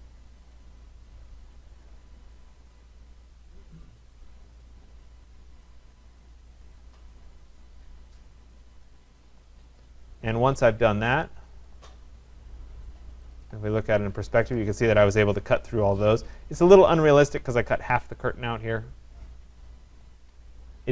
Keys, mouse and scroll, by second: 0.4 click, 1.1 click, 1.8 click, 4.2 click, 5.4 click, 6.5 click, 7.8 click, 8.9 click, 11.7 click, 13.2 click, 13.4 click, 14.1-14.5 scroll down 3, 14.5 scroll up 4, 15.7 scroll down 3, 16.5-17.3 scroll up 2, 17.3-18.4 scroll.